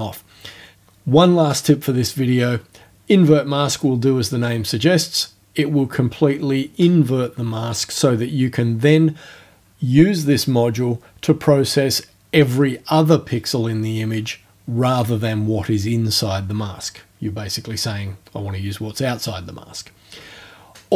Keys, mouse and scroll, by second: 4.3-4.6 scroll down 2, 18.7 scroll up 2.